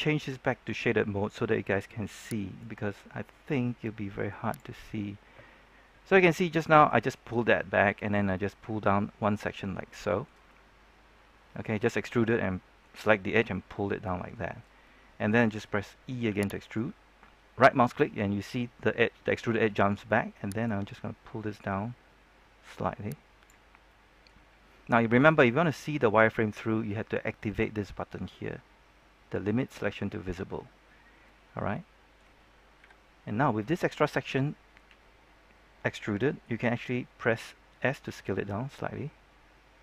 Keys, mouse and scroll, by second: 5.9-15.9 middle drag, 16.2 e, 16.6 right click, 20.6-23.6 drag, 23.6 scroll down 1, 23.8 middle click, 24.4 scroll up 1, 24.6 middle click, 32.7 KP_3, 38.0 s.